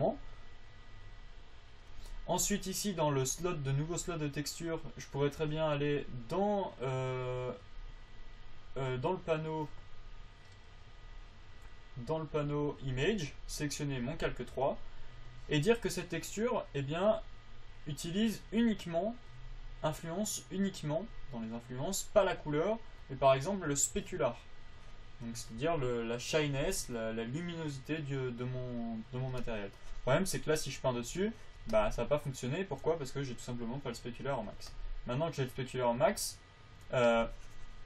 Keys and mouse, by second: 32.1-34.0 middle drag.